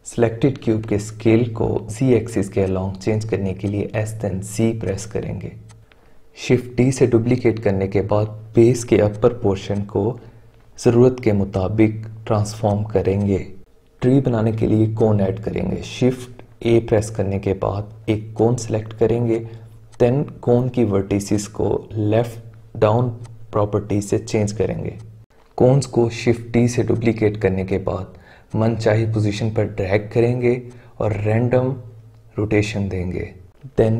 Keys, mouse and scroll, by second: 1.1 s, 3.9 s, 5.2 s, 6.8 shift+d, 9.1-10.8 drag, 10.8 s, 11.7 s, 13.1-14.7 drag, 16.5 shift+a, 19.2-21.3 drag, 23.2 click, 23.5-24.2 shift+middle drag, 24.2 shift+d, 24.9-25.8 drag, 25.8-28.8 typing, 26.8 click, 28.4 click, 29.8 shift+right click, 30.6-32.2 drag, 33.2 x, 33.2 shift+a.